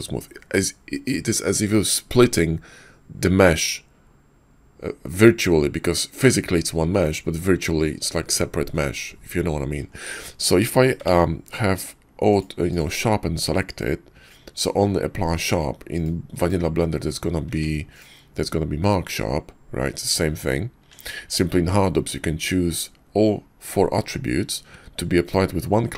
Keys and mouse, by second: 11.1 ctrl+`, 16.4-17.2 drag, 17.5 Tab, 17.9-20.4 drag, 20.8 Tab, 21.6 ctrl+`.